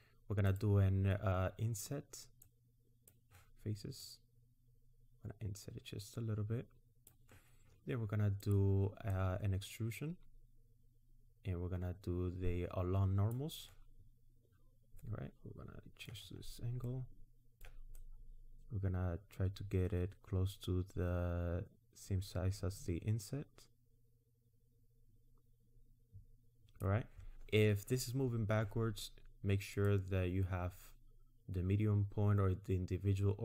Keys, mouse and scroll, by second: 0.5 click, 2.4 click, 4.0 click, 8.4 click, 9.1 click, 15.0 middle click, 16.3 scroll up 1, 16.9 middle click, 18.0 click, 29.8 click.